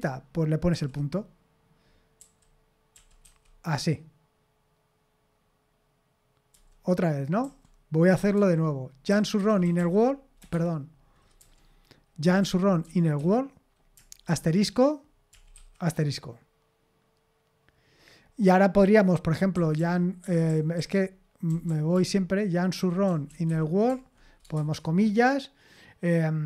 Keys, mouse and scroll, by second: 0.7 ., 2.2-3.2 typing, 6.5-16.0 typing, 10.5 Escape, 19.3-24.5 typing.